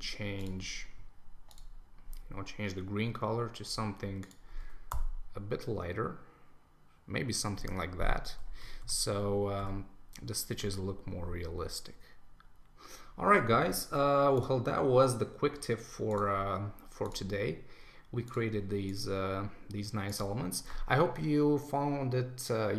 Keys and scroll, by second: 4.9 Return, 8.5 super+s.